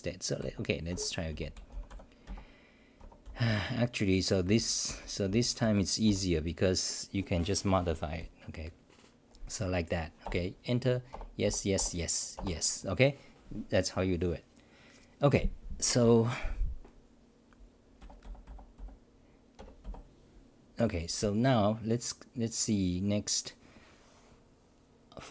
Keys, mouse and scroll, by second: 1.9 c, 2.2 Up, 3.0 Home, 3.0 BackSpace, 3.2-5.3 n, 5.3 h, 5.6 Delete, 6.0 l, 10.2 Return, 18.0 f, 19.8 Tab, 19.8 f.